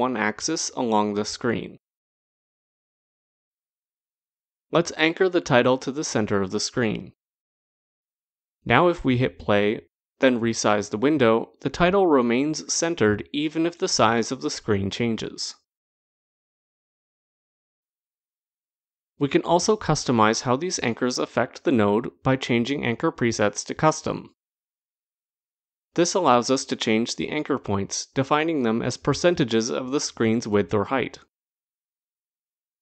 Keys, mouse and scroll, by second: 0.2 click, 0.3 click, 0.6 click, 0.7 click, 1.0 click, 1.6 click, 1.7 click, 1.9 click, 2.2 click, 2.5 click, 2.7 click, 2.9 click, 3.1 click, 3.4 click, 3.9 click, 7.3 click, 8.5 click, 17.1 click, 18.2 click, 20.0 click, 22.7 click, 24.6 click, 26.7 click.